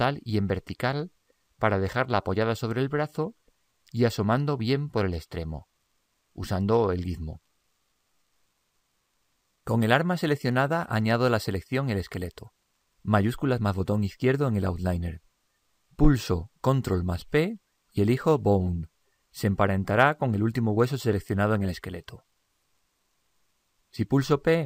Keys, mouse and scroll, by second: 0.6 click, 3.2-4.9 middle drag, 5.7 click, 14.6 click, 17.4 ctrl+p, 24.6 p.